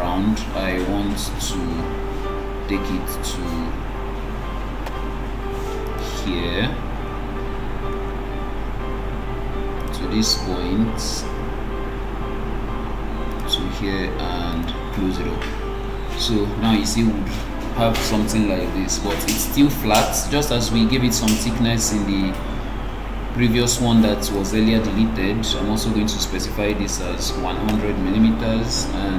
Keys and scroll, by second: 27.9 Return.